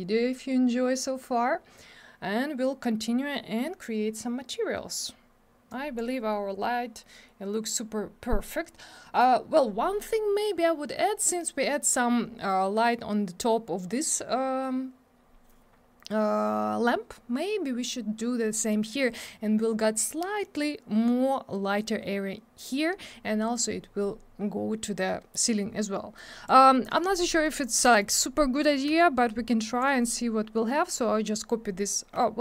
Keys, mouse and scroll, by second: 5.7 click, 26.2 click, 26.8 middle click, 26.9 middle click, 27.1-27.8 scroll down 2, 27.4 double middle click, 28.0 middle click, 28.1 scroll up 1, 29.0 shift+click.